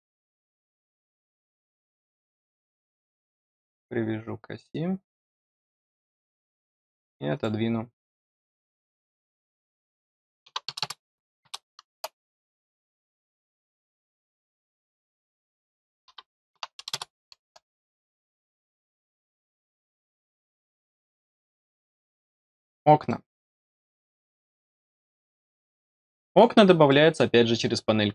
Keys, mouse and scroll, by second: 1.2 click, 3.2 click, 5.1 click, 5.8-6.1 scroll down 2, 7.2 click, 8.2 click, 13.1 click, 13.8 click, 18.3 scroll down 2, 19.1 scroll down 2, 19.9 middle click, 21.8-22.2 scroll down 2, 22.7 scroll down 2, 23.0-25.3 middle drag, 25.9 middle click, 26.8 middle click.